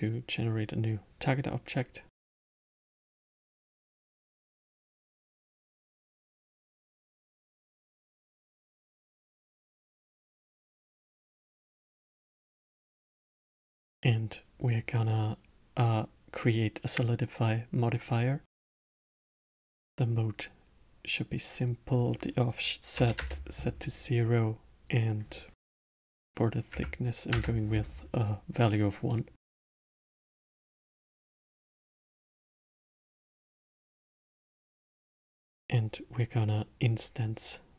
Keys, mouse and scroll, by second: 2.2 click, 2.8 click, 5.6 click, 5.8-8.9 drag, 14.6 click, 16.8-19.9 drag, 21.6-24.6 drag, 24.8-27.9 drag, 29.1-32.1 middle drag, 33.2-35.1 middle drag, 35.1 shift+a.